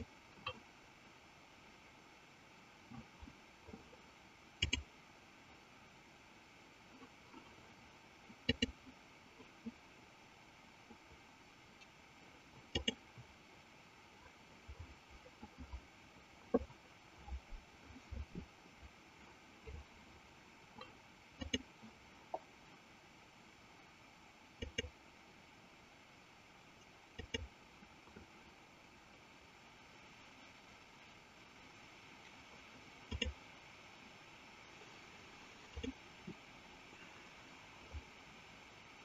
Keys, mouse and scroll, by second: 4.5 click, 8.3 click, 21.2 click, 24.6-27.5 drag, 33.0 click, 35.7 click.